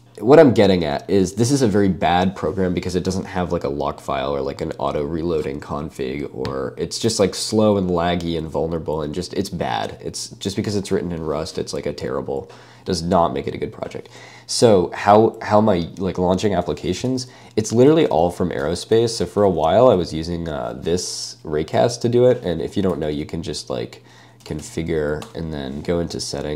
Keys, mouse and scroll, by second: 18.0 ctrl+space, 18.1 l, 18.4 Escape, 18.9 j, 19.3 super+space, 22.9 super+k, 24.2-25.3 typing, 25.3 Return.